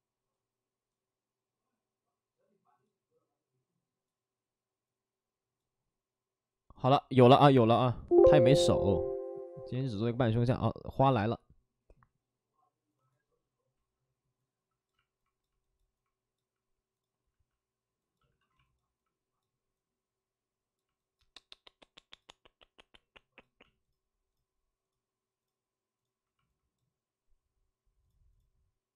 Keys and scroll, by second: 18.2 alt+s, 18.2 shift+f, 23.7 shift+f.